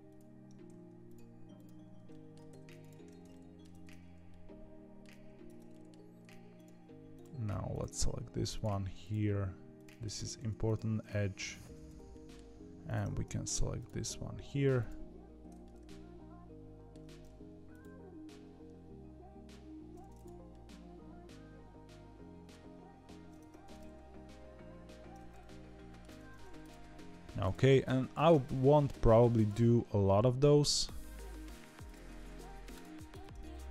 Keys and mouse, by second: 2.0 middle click, 2.4 ctrl+e, 3.2 middle click, 3.6 Tab, 4.2 middle click, 5.4 Tab, 5.6 middle click, 8.5-10.0 ctrl+drag, 10.2 ctrl+e, 12.0 middle click, 12.7 ctrl+z, 15.6-16.9 middle drag, 17.6 click, 20.4-22.4 middle drag, 23.3 Tab, 23.7-25.9 middle drag, 26.0 Tab, 26.5 click, 27.3 click, 27.6 middle click, 29.3 click, 32.2 ctrl+e, 33.0 Tab, 33.3-33.7 middle drag.